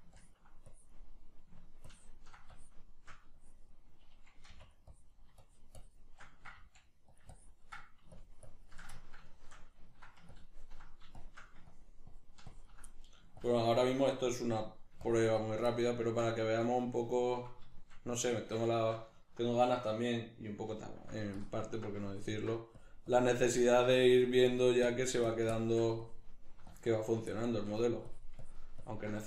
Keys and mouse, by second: 4.5 f, 5.4-7.2 shift+drag, 6.6 f, 7.4-9.0 ctrl+drag, 9.0-10.4 ctrl+middle drag, 10.4-12.9 ctrl+drag, 12.9 middle click, 13.4 ctrl+click, 14.4 middle click, 15.1 ctrl+click, 15.7-21.4 middle drag, 21.4-27.4 ctrl+drag, 27.4 shift+middle click, 28.1-29.2 drag.